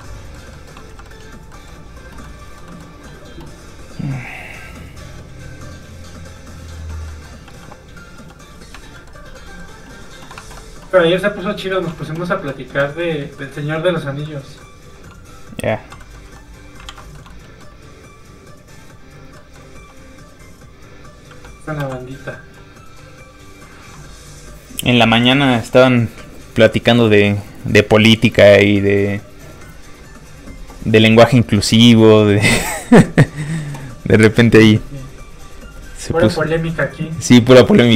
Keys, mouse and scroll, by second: 0.0 shift+middle click, 0.1 middle click, 0.8 z, 1.0 middle click, 1.2 scroll down 1, 1.5-4.0 scroll up 1, 4.0 scroll up 1, 4.1 click, 7.0 middle click, 7.4 f, 7.6 click, 8.0 scroll up 1, 8.1 f, 8.3 click, 8.9 shift+middle click, 9.3 middle click, 9.4 middle click, 10.4 alt+Tab, 11.6 alt+click, 13.0 middle click, 16.2 alt+z, 16.8 alt+shift+z, 17.1 shift+middle click, 17.2 middle click, 17.4 scroll up 1, 17.5 middle click, 18.2 click, 19.3 middle click, 19.7 f, 19.8 click, 21.7 n.